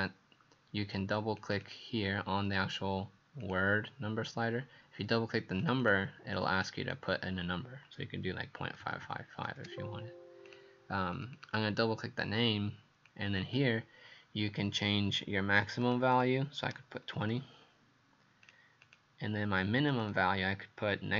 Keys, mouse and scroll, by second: 1.7 click, 3.4 click, 5.8 click, 6.6 click, 8.5 KP_Decimal, 8.7 KP_5, 8.8 KP_5, 9.6 KP_Enter, 10.5 click, 11.2 click, 13.1 click, 16.1 click, 17.2 KP_2, 17.2 KP_0, 18.9 click, 20.0 click.